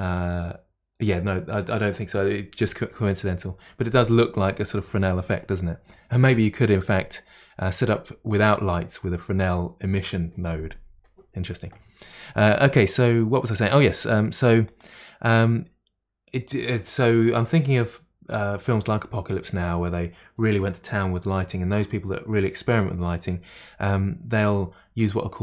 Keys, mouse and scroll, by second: 14.7 click.